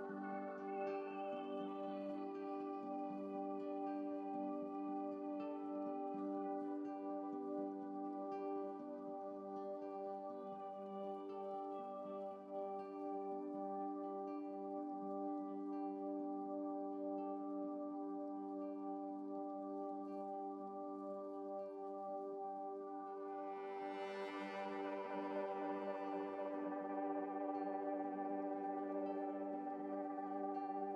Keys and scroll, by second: 12.5 Up, 12.5 ctrl+z, 13.1 ctrl+z, 13.2 ctrl+z, 15.7 Right, 15.9 Right, 17.2 Down, 18.2 Down, 18.4 Down, 19.1 Down, 19.2 Left, 20.8 ctrl+z, 21.9 ctrl+z, 23.0 ctrl+z, 23.2 ctrl+z, 29.0 F7.